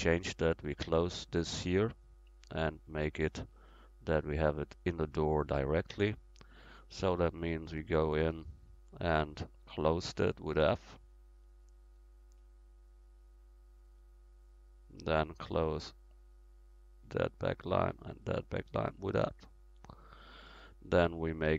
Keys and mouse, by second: 1.6-2.3 right drag, 2.4 right click, 7.7 Tab, 10.2 f, 13.8 middle click, 15.8-19.1 right drag, 19.1 f.